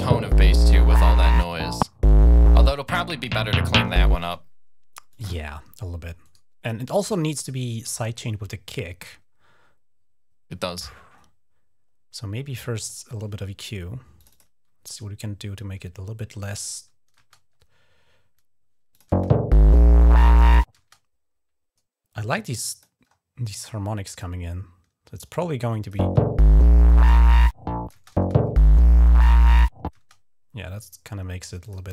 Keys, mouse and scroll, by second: 4.0 space, 4.9 click, 6.0 right click, 12.6 click, 13.9 click, 16.4 click, 17.0 space, 18.7 click, 18.9 space, 20.5 space, 21.9 click, 22.8-23.2 scroll up 1, 23.3-23.6 scroll down 1, 23.9 typing, 24.0-25.7 drag, 25.8 typing, 26.9 click, 27.5 typing, 29.8 space, 30.5 click, 31.5 click.